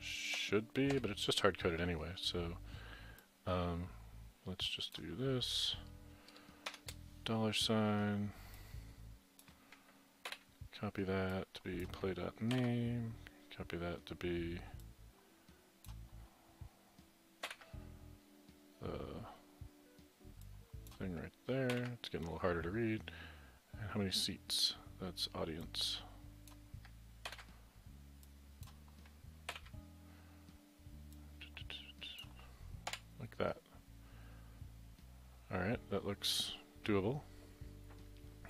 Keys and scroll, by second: 0.4 Delete, 1.0 Delete, 7.0 shift+4, 10.3 ctrl+c, 12.6 ctrl+v, 17.5 ctrl+c, 21.7 ctrl+v, 27.3 ctrl+c, 29.5 ctrl+v, 32.9 Delete, 35.5 Delete.